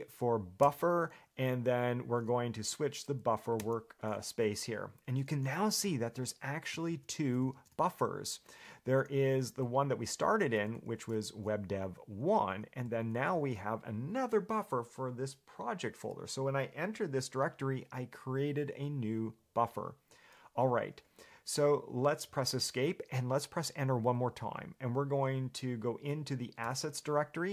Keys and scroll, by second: 6.2 ctrl+j, 7.1 ctrl+k, 7.8 ctrl+j, 11.1 ctrl+k, 13.3 ctrl+j, 22.1 Escape, 26.8 Return.